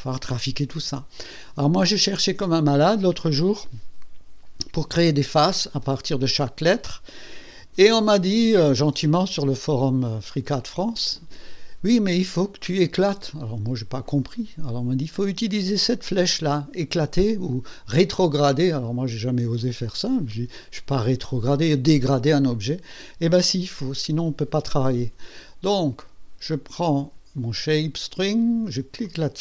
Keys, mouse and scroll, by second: 29.0 click.